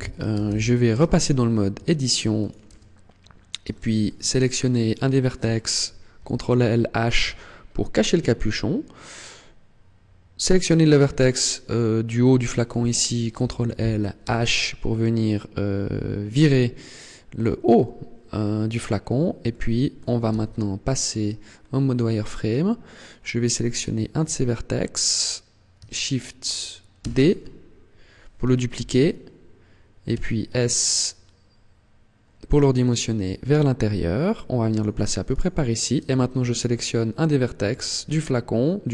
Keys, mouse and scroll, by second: 0.2 alt+h, 0.8 Tab, 1.6 Tab, 2.2 right click, 2.6 Tab, 2.9-3.2 scroll up 2, 3.6 shift+middle click, 4.8 right click, 6.0 ctrl+l, 7.0 h, 9.0 right click, 13.2 ctrl+l, 14.1 h, 19.3 shift+middle click, 20.2 z, 21.0-21.5 scroll up 3, 23.6 alt+right click, 26.8 shift+d, 34.7 click, 35.2 right click.